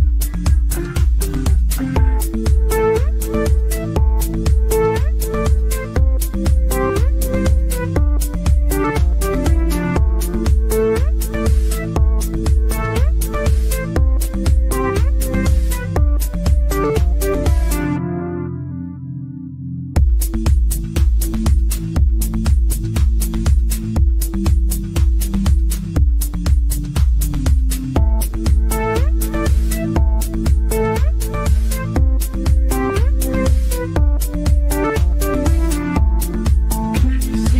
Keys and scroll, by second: 17.3 ctrl+z, 25.8 ctrl+z.